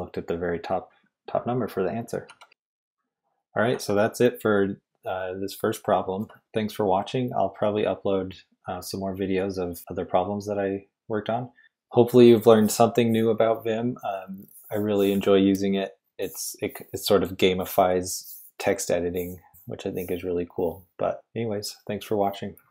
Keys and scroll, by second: 0.7-2.5 typing.